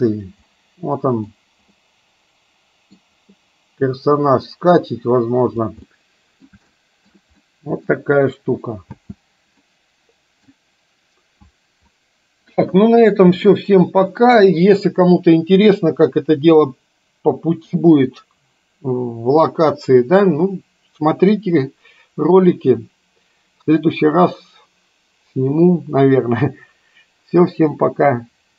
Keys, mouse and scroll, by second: 0.6-1.2 middle drag, 1.8-3.0 middle drag, 3.3-5.7 middle drag, 5.8-6.5 middle drag, 6.8 shift+middle drag, 7.5 middle click, 9.0 space, 9.6-10.6 middle drag, 13.6-14.3 shift+middle drag.